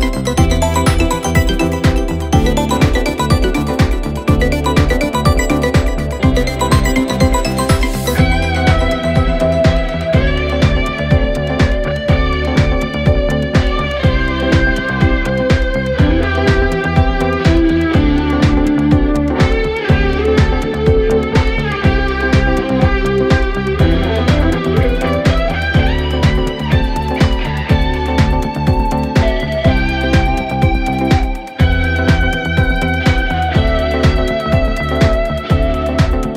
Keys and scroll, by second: 4.6-5.5 typing, 12.0 0, 12.1 Return, 18.5-19.4 typing.